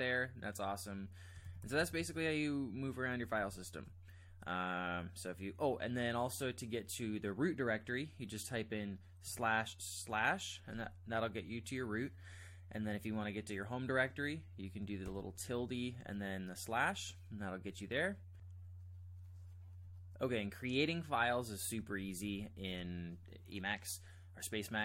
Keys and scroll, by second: 1.4 ctrl+j, 1.6 ctrl+j, 1.8 ctrl+j, 2.0 ctrl+j, 2.3 ctrl+j, 3.2 ctrl+k, 3.4 ctrl+k, 9.2-10.1 typing, 15.1-16.0 typing, 22.0 ctrl+j, 22.2 ctrl+j, 22.5 ctrl+j.